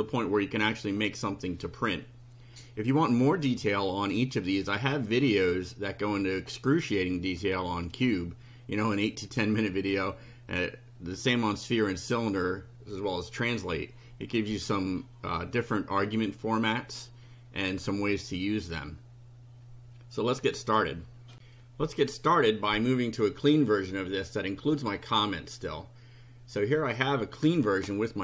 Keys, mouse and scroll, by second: 5.0-6.6 drag, 10.5-11.5 drag, 21.3 ctrl+r, 25.6 click.